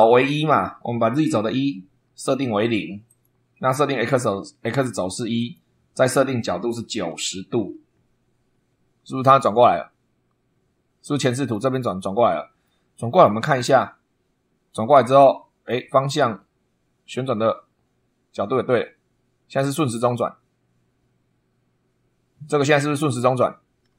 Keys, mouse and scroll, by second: 0.0 click, 1.4 o, 3.0 click, 3.9 1, 4.6 click, 5.3 click, 6.9 9, 7.4 0, 11.4 click, 12.6-14.0 middle drag.